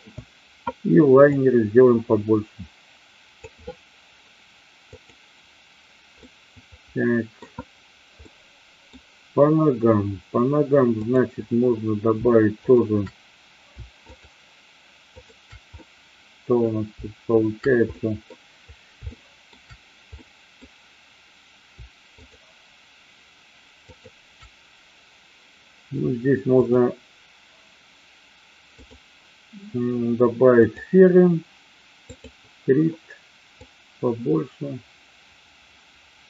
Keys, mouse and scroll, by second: 1.2-3.4 drag, 4.9 click, 6.2-7.3 middle drag, 8.2-8.9 middle drag, 10.9 click, 12.5-13.3 shift+drag, 14.0-14.7 shift+drag, 15.2-15.8 shift+drag, 15.8-16.7 middle drag, 17.9 middle drag, 19.0-19.4 shift+middle drag, 20.2-20.5 middle drag, 22.3-22.8 shift+drag, 23.9 shift+click, 26.7 click, 28.8-30.8 drag, 31.9 click, 33.5-36.2 drag.